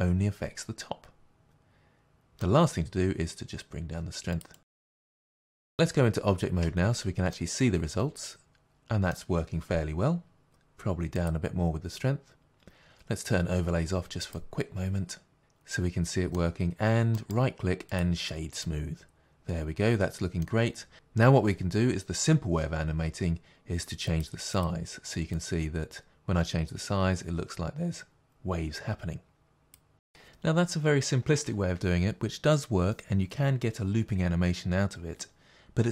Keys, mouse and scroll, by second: 4.4 click, 5.7 middle click, 6.6 Tab, 7.3 middle click, 11.2-12.4 drag, 14.2 click, 15.4 middle click, 18.0 right click, 18.6 middle click, 24.2-34.3 drag, 34.9-35.9 drag.